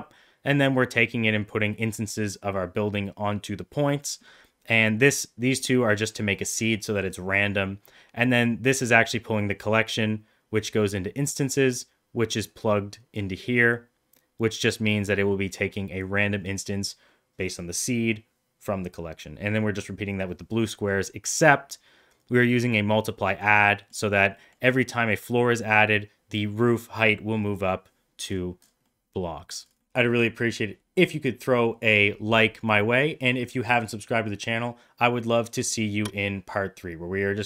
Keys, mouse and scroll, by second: 12.5 click, 14.4-16.1 drag, 21.4 middle click, 23.9 middle click, 24.5 middle click, 28.9-29.6 middle drag, 29.8 middle click.